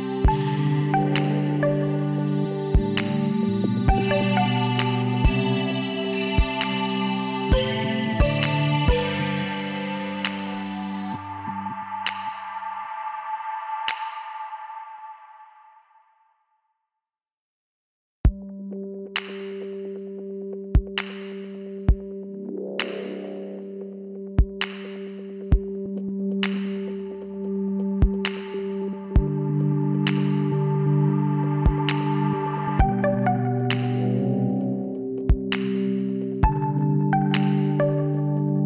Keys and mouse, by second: 1.7 r, 5.2-7.1 drag, 8.4-11.3 middle drag, 11.3 click, 11.7 z, 12.5 b, 14.2 b, 16.5-17.7 drag, 18.4-20.4 middle drag, 20.4 Tab, 21.4 Tab, 21.9 ctrl+z, 22.3 ctrl+z, 23.2 ctrl+z, 23.4 ctrl+z, 23.7 ctrl+z, 23.9 ctrl+z, 24.3 ctrl+z, 24.7 ctrl+z, 25.2 ctrl+z, 28.1-29.8 drag, 28.7 b, 30.6-32.3 middle drag, 31.8-35.0 drag, 37.6-38.6 drag, 38.5-38.6 middle drag.